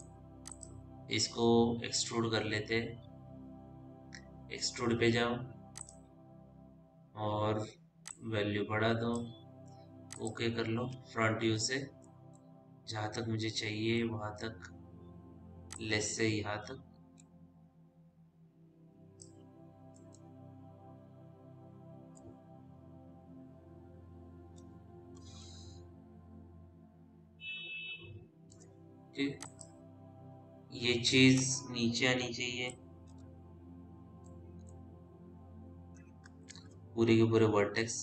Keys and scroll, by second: 11.2 f, 22.6 p, 24.3 F3, 33.4 f, 37.0 ctrl+z.